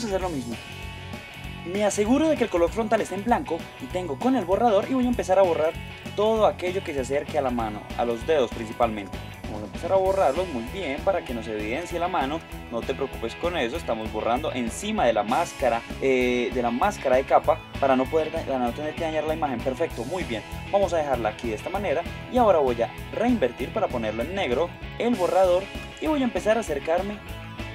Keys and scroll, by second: 24.5 super+space.